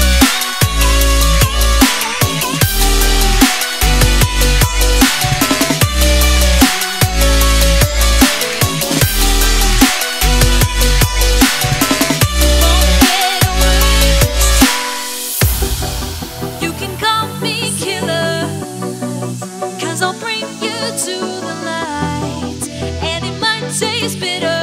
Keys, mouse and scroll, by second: 1.0 click, 1.8 Delete, 2.4 click, 23.5 alt+scroll down 1, 24.0-24.6 scroll up 1.